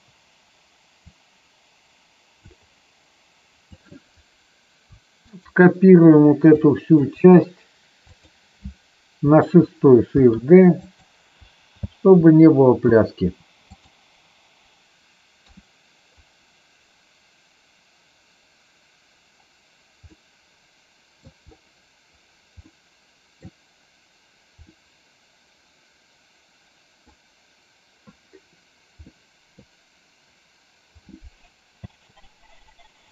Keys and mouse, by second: 1.1 click, 3.7 click, 5.3-5.9 shift+drag, 6.7 shift+drag, 7.9 click, 10.1 shift+d, 10.9 click, 11.8 space, 13.7 click, 15.4 KP_3, 20.0-21.1 middle drag, 22.5-23.4 middle drag, 24.5-27.1 middle drag, 28.9-29.5 middle drag, 31.8 space, 33.0-33.1 drag.